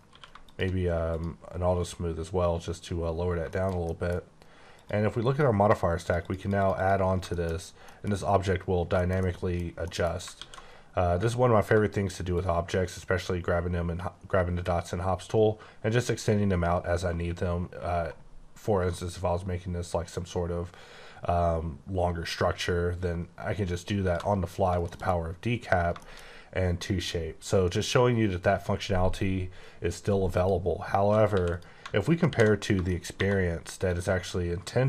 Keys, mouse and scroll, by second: 0.1 q, 0.4 click, 1.1 click, 2.4 scroll down 1, 3.2 scroll down 2, 3.5 shift+middle click, 4.7 click, 6.0 click, 6.2 double click, 6.4 click, 6.6 click, 6.8 double click, 7.3 shift+middle click, 7.6 scroll up 1, 7.8 middle click, 8.1 scroll up 3, 8.6-8.9 scroll down 4, 8.9 shift+middle click, 9.2 shift+double middle click, 9.8 middle click, 10.3 alt+w, 12.4 ctrl+shift+click, 24.5 scroll down 3, 24.9 shift+middle click, 25.5-26.3 scroll up 3, 26.0 shift+middle click, 30.4 click, 31.3 x, 31.5 click, 32.3 alt+h, 32.9 shift+middle click, 33.2 1, 33.5 scroll up 2, 33.8 click.